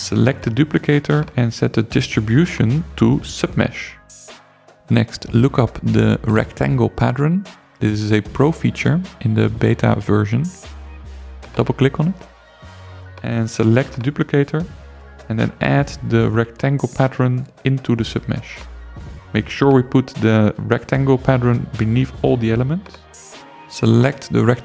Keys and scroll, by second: 7.3-8.6 typing, 24.4 7.